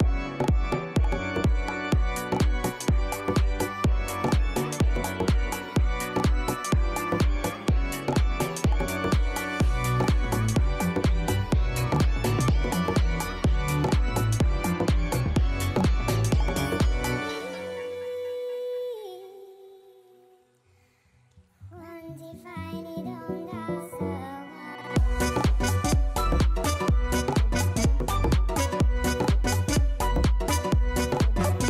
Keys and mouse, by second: 1.0 click, 2.9 click, 4.3 e, 4.6 h, 7.6 click, 8.3 click, 9.3 r, 9.4 u, 12.7 click, 15.8 click, 19.3 click, 21.8 click, 23.8 click, 26.7 click, 27.6 click, 28.8 click.